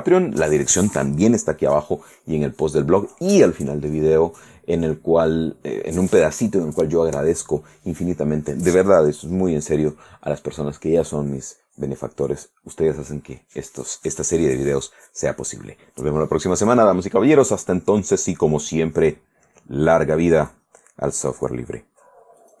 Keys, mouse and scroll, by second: 20.6 click.